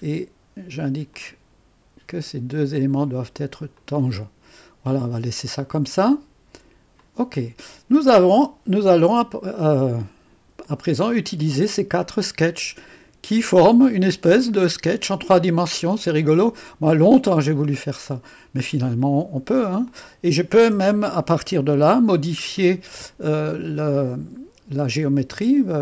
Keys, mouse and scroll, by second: 1.1 click, 2.6 click, 3.8 click, 7.0 click, 8.8-11.5 drag, 12.0-14.6 drag, 14.6-15.5 scroll up 2, 15.5-16.9 drag, 17.6 middle click, 18.1-19.9 drag, 20.3 click, 20.8-22.1 typing, 22.2-25.8 scroll down 2.